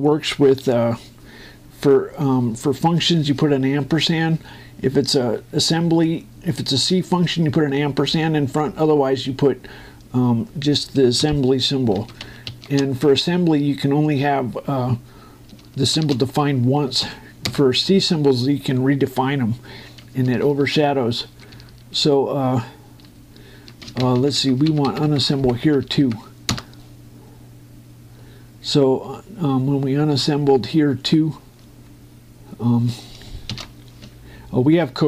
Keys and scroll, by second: 12.0 shift+0, 16.7 shift+0, 18.2 Return, 21.0 Up, 24.6 Right, 24.7 Down, 25.1 Right, 25.4 Down, 26.4 2, 26.6 Right.